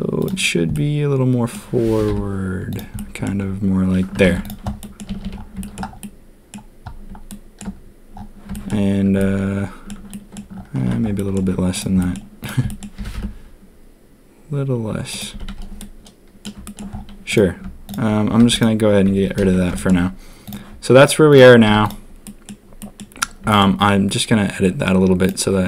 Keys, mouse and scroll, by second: 0.7 click, 0.8-1.3 middle drag, 1.3 click, 1.8 g, 2.9 drag, 4.2 ctrl+a, 4.8 drag, 5.0 a, 5.2 a, 5.6 shift+drag, 6.0-6.5 drag, 7.2-7.5 shift+drag, 8.5 shift+middle drag, 9.1-9.8 middle drag, 10.1 middle drag, 11.1 drag, 11.9 click, 12.6 click, 12.9 g, 15.3 a, 15.4 a, 15.7-16.4 drag, 16.6 shift+drag, 17.2 click, 17.8 shift+click, 18.4 x, 19.4 ctrl+s, 19.7 shift+drag, 20.4 click, 21.6 z, 22.2 middle drag, 22.7 middle click, 23.4 shift+drag, 25.2 click.